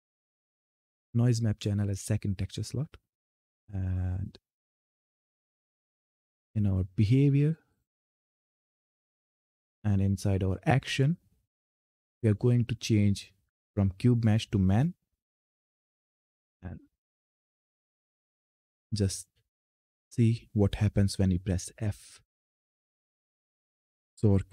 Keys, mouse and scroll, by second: 2.9-5.4 drag, 14.1 click, 18.1 ctrl+F10, 21.7 f.